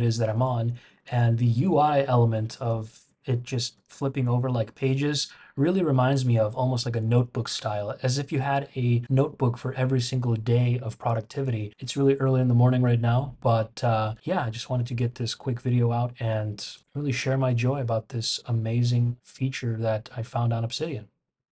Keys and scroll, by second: 1.1 shift+super+[, 2.7 shift+super+[, 3.7 shift+super+], 4.7 shift+super+], 6.1 shift+super+[, 11.7 shift+super+].